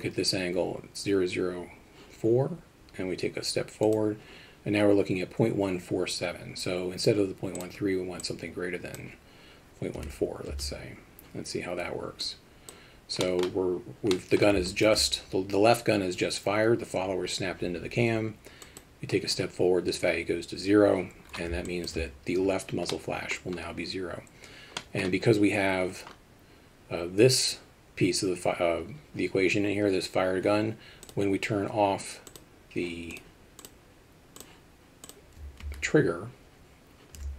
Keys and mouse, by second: 3.9 click, 7.6-11.3 drag, 12.4 click, 13.4 middle click, 14.2 middle click, 14.7 alt+shift+middle click, 18.7 click, 21.7 alt+shift+middle drag, 22.9-23.3 middle drag, 24.8 middle click, 32.4 click, 33.8-34.4 drag, 35.7 alt+r.